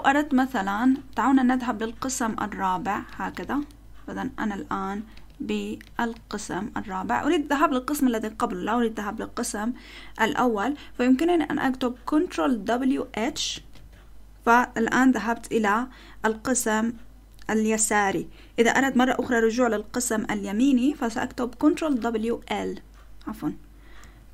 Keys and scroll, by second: 2.7 ctrl+w, 3.0 ctrl+w, 3.4 ctrl+w, 5.1 ctrl+w, 5.8 ctrl+w, 6.1 ctrl+w, 13.5 ctrl+w, 13.7 h, 21.7-22.8 typing.